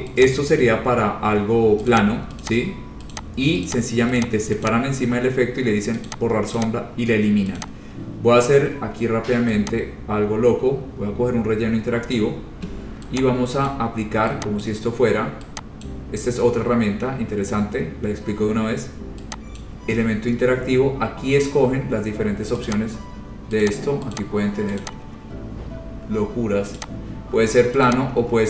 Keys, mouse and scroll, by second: 0.5 click, 1.1-1.5 scroll, 2.1 click, 2.7 click, 3.3 click, 3.9 click, 4.4 click, 4.9 click, 6.3 click, 6.8 click, 7.2-7.5 scroll, 7.8 click, 12.3 click, 13.9 click, 14.8 click, 16.1 click, 19.8 click, 22.9 click, 23.8 click, 24.4 click, 25.0 click, 27.0 click, 28.1 click.